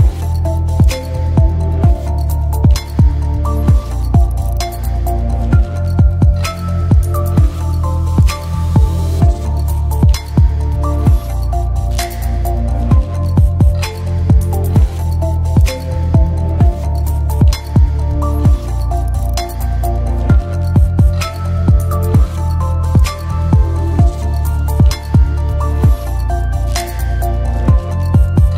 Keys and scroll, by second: 2.2 space.